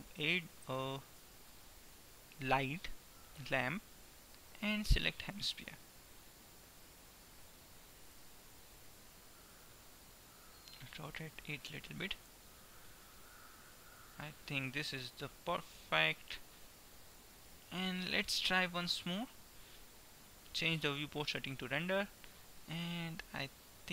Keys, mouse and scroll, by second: 1.0 shift+a, 5.4-7.2 middle drag, 7.2-11.9 drag, 12.2 r, 16.2-19.0 middle drag, 19.2-20.7 drag, 21.0-22.4 drag.